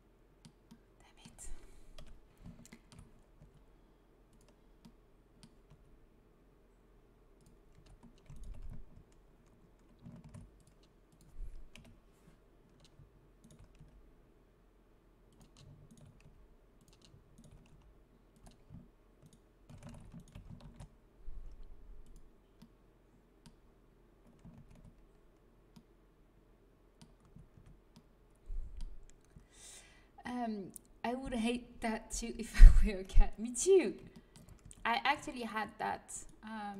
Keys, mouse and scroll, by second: 1.9 KP_3, 3.3 g, 5.6 g, 7.0 click, 7.7 a, 10.1 ctrl+r, 11.6 KP_1, 13.7 g, 15.0 click, 16.1 g, 17.6 g, 19.8 ctrl+z, 20.5 ctrl+b, 24.5 ctrl+z, 27.1 a, 27.5 Tab, 32.9 KP_1, 34.5 Tab, 35.3 middle click, 36.2 click, 36.3 right click.